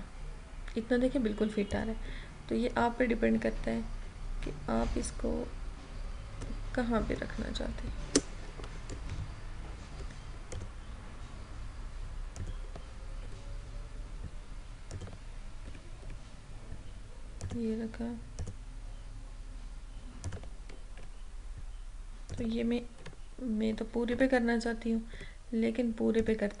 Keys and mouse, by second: 9.2 ctrl+d, 10.7 click, 13.3 Up, 15.0 click, 15.8 Up, 17.5 click, 21.1 Up, 22.4 click, 23.1 Left, 25.2 Up, 26.3 click.